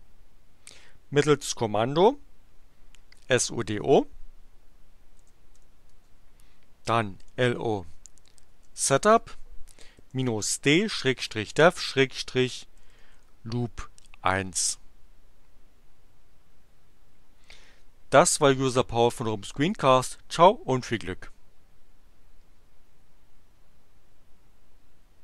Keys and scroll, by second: 2.8-4.1 typing, 5.2-13.7 typing, 14.6 Return.